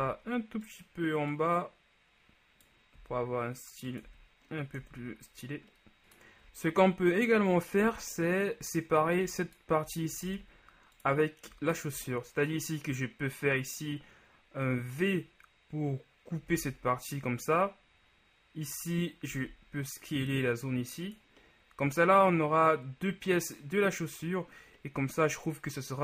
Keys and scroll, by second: 0.1 z, 3.1 s, 4.9 Tab, 7.9 Tab, 10.4 ctrl+alt+Tab, 16.7 v, 19.5 s.